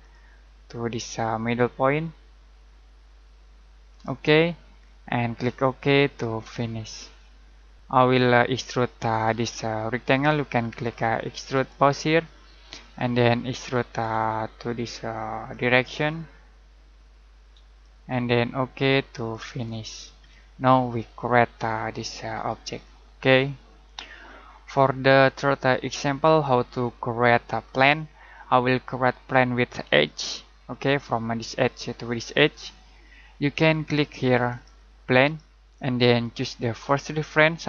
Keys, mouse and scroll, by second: 0.0 click, 3.9 click, 4.8 middle click, 6.8 click, 7.7 middle click, 11.9 click, 12.6 middle click, 13.6-13.9 scroll down 1, 13.9 scroll up 1, 15.4 click, 20.3 middle click, 27.6-28.1 scroll down 1, 30.0 middle click, 36.9 click.